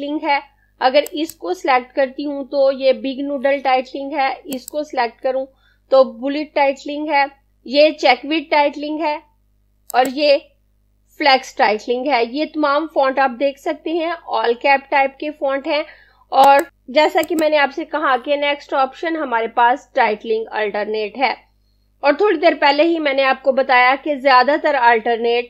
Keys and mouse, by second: 0.9 click, 4.1 click, 9.9 click, 16.5 click.